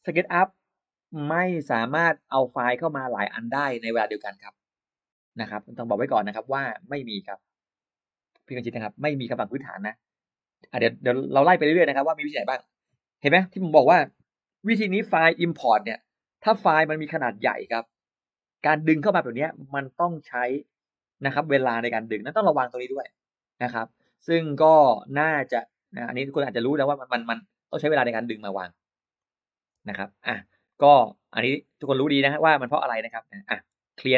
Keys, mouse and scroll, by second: 29.1 click, 29.6-29.9 scroll down 1, 29.7 space, 30.0 click, 30.5 middle click, 30.8-31.1 scroll up 2, 31.1 click, 31.5-32.2 scroll up 4, 32.2-32.9 scroll down 6, 33.0 middle click, 33.5 e, 33.7 click.